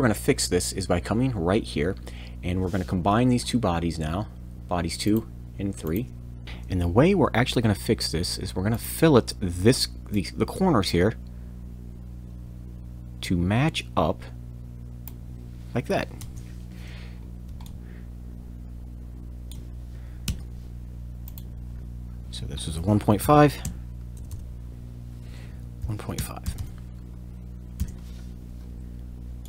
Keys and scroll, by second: 6.4 shift+Escape, 7.1 shift+f, 16.2 Return, 20.2 f, 20.3 f, 23.6-26.2 typing, 24.7 Return, 27.8 Return.